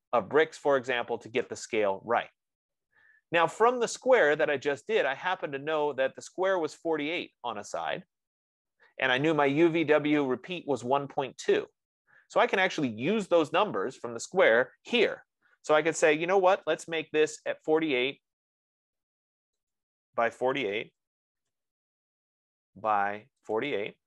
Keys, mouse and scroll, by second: 6.5 click, 9.8 F15, 16.8-17.6 typing, 17.7 Tab, 20.2-24.0 drag, 21.5-22.3 typing.